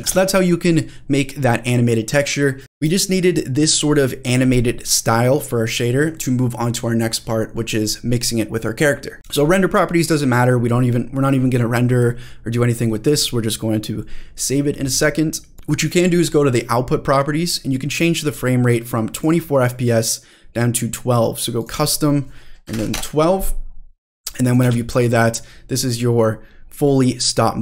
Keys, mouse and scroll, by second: 0.0 click, 1.9 space, 2.6 click, 2.6 space, 2.8 space, 4.3 space, 5.1 click, 9.2 click, 14.8 click, 15.5 click, 19.1-20.8 drag, 21.6-23.4 drag, 24.1 click, 24.6 space.